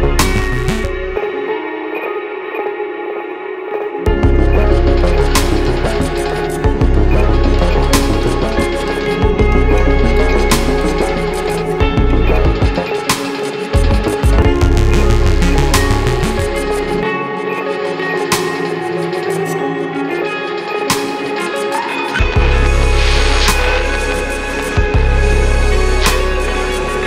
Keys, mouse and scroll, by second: 2.0 click, 2.2 right click, 2.7 click, 4.4 right click, 4.9 click, 7.7 scroll up 1, 8.4 right click, 9.4 right click, 10.3 click, 13.2 space, 13.3 click, 13.8 space, 14.7 alt+right click, 15.8 click, 20.6 space, 20.8 click, 21.4 space, 21.6 click, 23.5 space, 23.7 click, 24.2 space, 24.8 click.